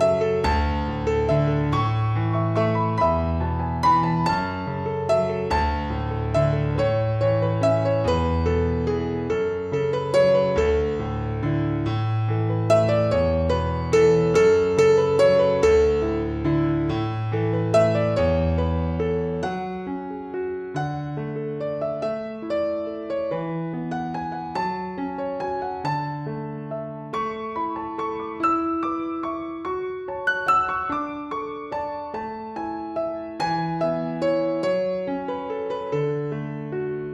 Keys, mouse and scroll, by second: 0.1 a, 1.0 click, 4.7 click, 6.5 click, 8.3 click, 9.9 click, 11.6 click, 12.6 click, 14.1 alt+click, 17.2 click, 19.7 alt+click, 22.9 click, 25.3 click, 26.6 click, 28.5 click, 31.8 click, 35.4 Left.